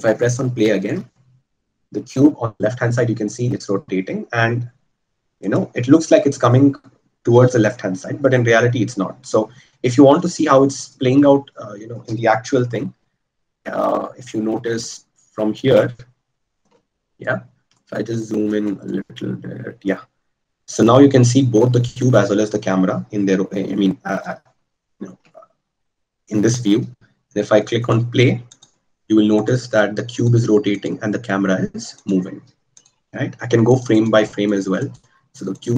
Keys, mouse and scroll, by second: 26.4 a.